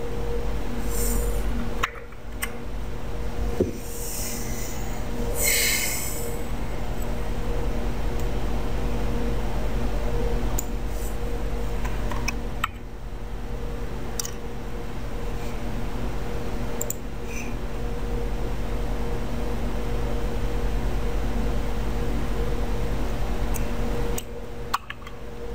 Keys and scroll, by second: 2.0 BackSpace, 2.5 w, 24.9 BackSpace.